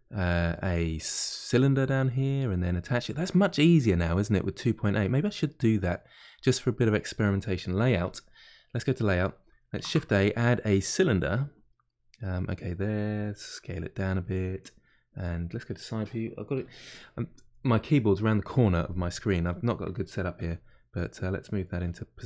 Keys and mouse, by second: 1.8-3.1 drag, 3.1 middle click, 4.0-5.4 drag, 5.4-8.1 middle drag, 8.1 click.